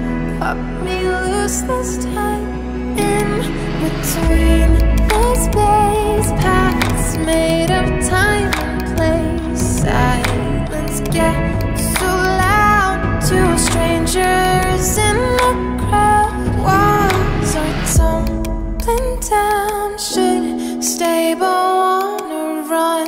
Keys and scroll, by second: 13.5 ctrl+g, 15.1-17.3 typing.